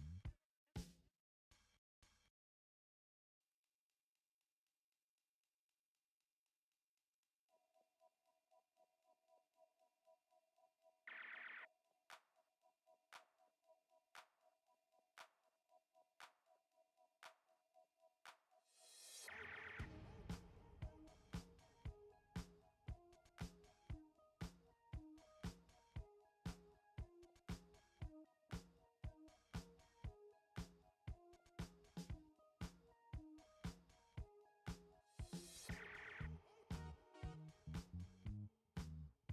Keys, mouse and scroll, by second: 0.3 ctrl+click, 5.6 click, 9.0 click, 10.8 ctrl+d, 12.6 shift+9, 16.5 click, 20.5 click, 26.6 click, 30.7 typing, 36.5 click, 36.6-37.0 alt+scroll up 3, 38.1 space, 38.8 space.